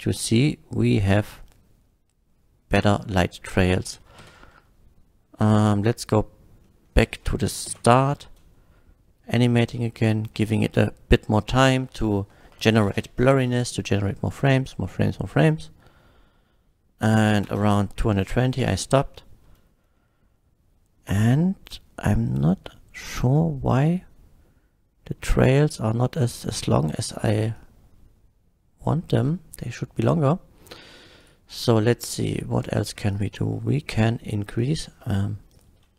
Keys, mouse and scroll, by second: 2.9 click, 3.5 click, 4.2 shift+Left, 6.0 click, 6.7 middle click, 7.7 shift+Left, 8.2 space, 17.5 space, 18.6 F12, 27.5-28.9 drag, 30.0 click, 31.2 click, 32.2 click, 33.1 click, 34.6 click, 35.0 middle click, 35.5 click.